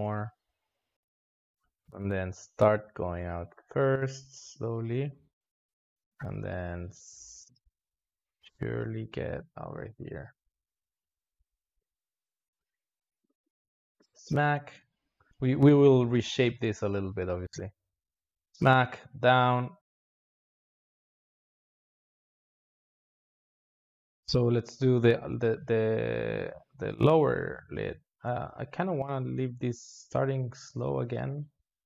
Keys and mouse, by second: 2.7 s, 4.7-8.2 drag, 8.9 click, 9.4 s, 10.7 drag, 10.9 space, 13.1 space, 13.4-19.2 drag, 23.3 space, 23.9 space, 24.7-28.0 drag, 29.2-31.3 drag, 31.3 s.